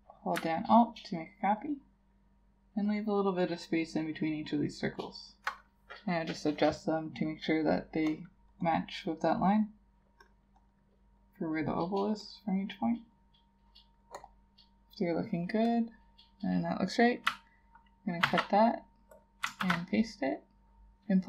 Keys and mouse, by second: 0.8 alt+click, 2.9 alt+click, 10.6 double click, 18.3 ctrl+x, 19.7 ctrl+shift+v.